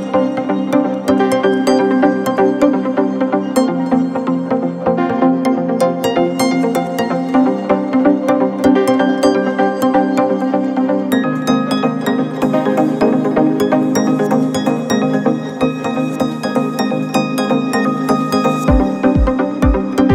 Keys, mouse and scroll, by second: 0.8 click, 1.4 click, 1.9 scroll down 1, 2.3 click, 2.7-6.0 shift+middle drag, 6.0 click, 6.4 KP_1, 6.8 scroll down 1, 7.1-7.6 middle drag, 7.6-8.9 drag, 9.2-10.9 middle drag, 10.9 Tab, 11.2 middle click, 11.4 scroll up 2, 11.8 right click, 12.4 middle click, 12.8 g, 17.6 Tab, 17.9 scroll down 2, 18.2-19.4 middle drag, 19.4 click.